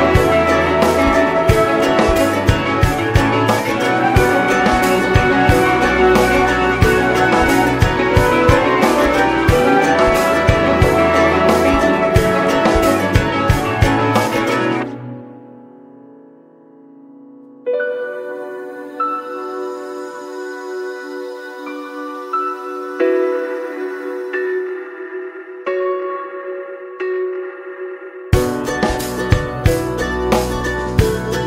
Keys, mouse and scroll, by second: 0.4-2.6 drag, 0.6-1.1 scroll down 4, 2.6 middle click, 3.4 click, 3.8 middle click, 4.6-10.0 drag, 13.5 click, 14.1 middle click, 14.4 space, 14.7 space, 14.8 middle click, 15.5 click, 16.2 click, 16.5-17.5 middle drag, 17.5-19.7 drag, 19.7 middle click, 20.1 click, 20.8-23.0 scroll up 3, 23.3-31.4 drag.